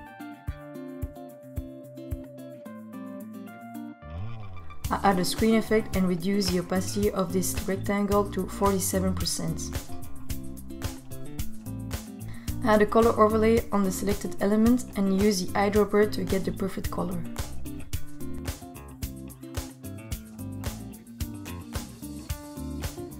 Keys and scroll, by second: 0.2 super+Down.